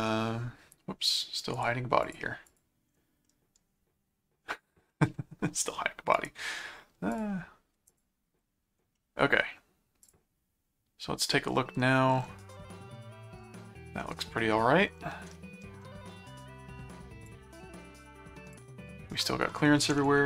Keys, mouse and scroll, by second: 0.1 middle click, 1.5 right click, 2.0 click, 3.3 middle click, 4.9 middle click, 6.1 right click, 7.1 click, 7.8 click, 8.9 middle click, 10.0 click, 12.9 middle click, 14.0 middle click, 15.4 middle click, 17.3 click.